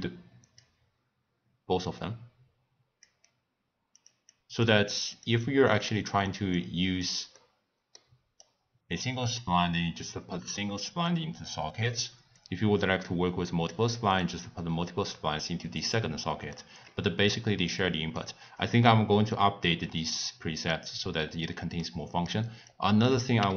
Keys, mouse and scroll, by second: 1.8 drag, 3.9 click, 4.3 click, 5.4 click, 6.5-7.3 drag, 7.3-8.4 middle drag, 8.4 click, 10.0 drag, 12.4 click, 14.2-16.5 drag, 16.5 middle click, 17.3 click, 18.5 click, 19.3 click, 21.8-22.7 middle drag, 22.7 click, 23.4 g.